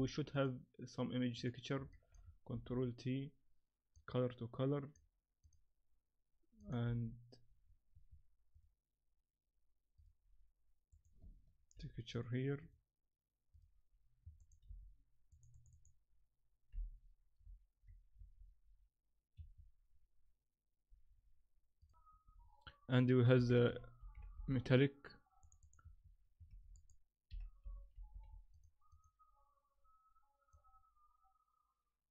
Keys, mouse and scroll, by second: 1.9 shift+middle click, 2.5 ctrl+t, 3.9 click, 5.4 click, 25.6 click, 26.5 shift+a, 30.5 click.